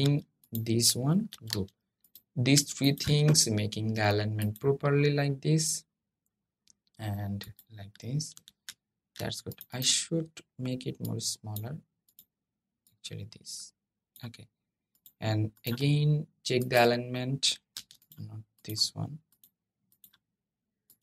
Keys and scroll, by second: 1.0 super+g, 17.5 super+z.